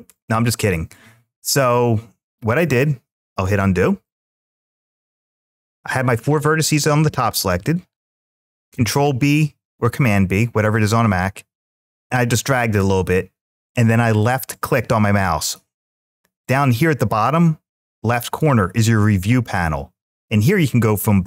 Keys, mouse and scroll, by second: 2.9 click, 3.5 ctrl+z, 4.3 ctrl+z, 8.5 ctrl+b, 14.0 click, 16.2 click, 18.1 click.